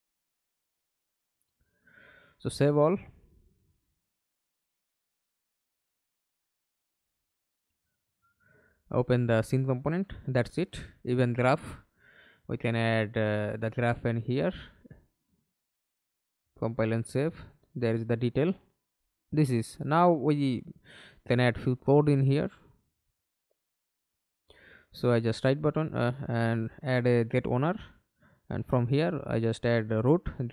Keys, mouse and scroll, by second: 4.8 double click, 9.0 right click, 18.3 right click, 18.8-20.7 scroll up 2, 20.7 right click, 23.3-25.0 typing, 25.5 Return, 30.4-30.5 typing.